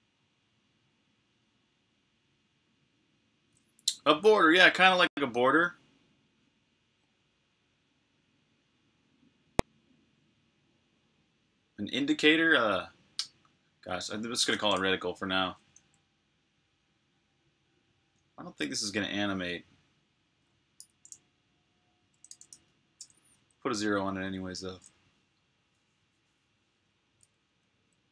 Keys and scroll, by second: 15.3-16.1 typing, 22.7-23.4 typing, 25.2 typing, 27.5 Left.